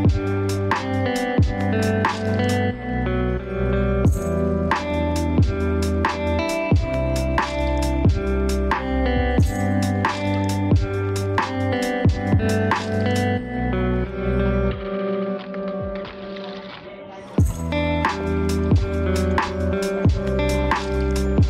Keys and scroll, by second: 2.6 ctrl+space, 11.4 ctrl+space, 20.5 ctrl+space.